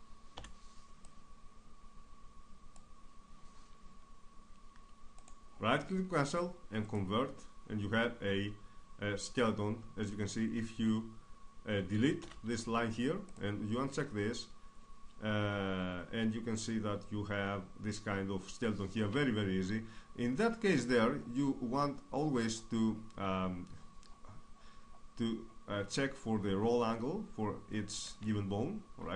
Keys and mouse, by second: 0.4 Delete, 1.0-3.6 drag, 5.2 right click, 6.8-12.2 drag, 12.2 Delete, 13.3-15.7 drag, 19.6-29.1 middle drag, 29.0 Tab.